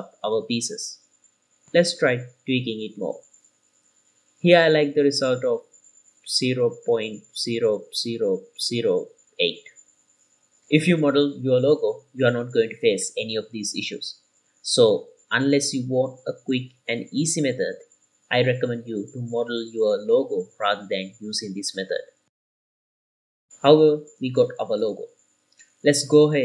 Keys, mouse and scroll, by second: 2.9 scroll down 2, 3.2-5.5 middle drag, 6.0 click, 10.1-10.7 scroll up 3, 10.6-11.9 middle drag, 12.4-16.5 middle drag, 17.3-17.9 scroll down 2, 17.9-20.1 middle drag, 17.9 scroll down 1, 20.3-20.7 scroll up 4, 21.1-21.7 shift+middle drag, 23.1-23.6 scroll down 3, 23.6-26.0 middle drag.